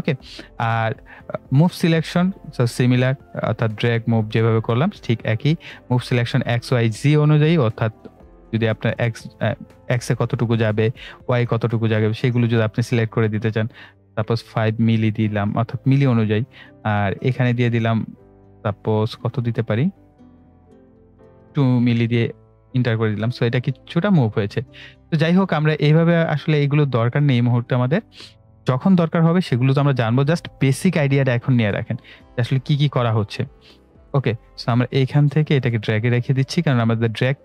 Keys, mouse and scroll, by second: 12.5-15.9 drag, 15.9-23.1 drag, 28.3-35.6 drag.